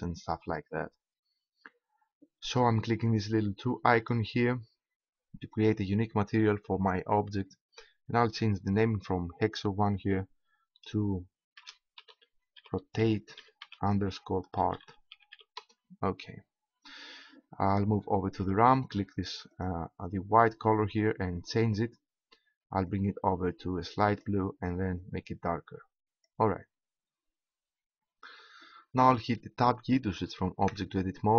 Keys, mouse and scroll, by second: 3.9-5.1 drag, 19.5-21.1 drag, 21.4-23.7 drag, 27.7 middle click, 28.7 middle click, 30.7 Tab.